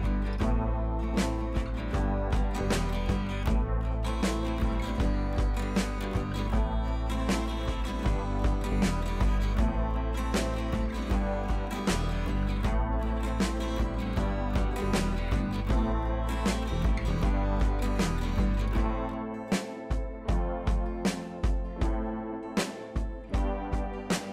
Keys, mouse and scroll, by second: 2.1 click, 3.3 scroll up 1, 3.7 scroll down 1, 7.1 click, 7.8 scroll down 1, 8.0 scroll up 1, 11.1 scroll down 1, 11.3-12.0 scroll up 1, 12.0 click, 13.2-13.9 click, 15.0 scroll up 1, 16.6 click, 17.4 scroll down 1, 18.2-21.6 typing, 18.9 click, 21.3-22.7 drag, 22.7-24.3 typing, 22.9-23.5 click, 23.9-24.3 click.